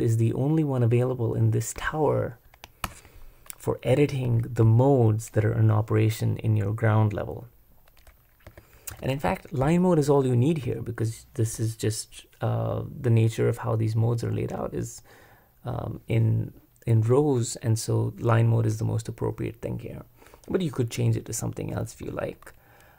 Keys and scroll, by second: 2.8 super+Return, 3.9 typing, 8.2-9.0 typing, 22.8-22.9 typing.